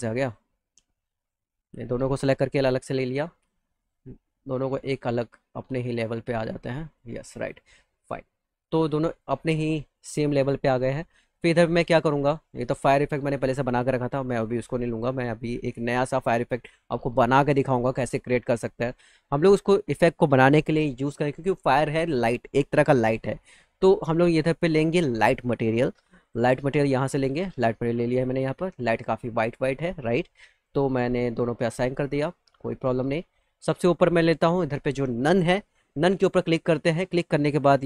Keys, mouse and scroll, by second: 0.1 click, 1.1 ctrl+click, 2.6 alt+middle click, 3.2 click, 3.6 click, 4.9-6.8 drag, 7.1 click, 7.3 click, 7.7 middle click, 8.0 alt+middle click, 9.1 click, 10.3 middle click, 11.1 click, 14.2 click, 24.7 click, 26.1 click, 27.1 click, 27.2 click, 30.3 click, 31.5 click, 36.2 click.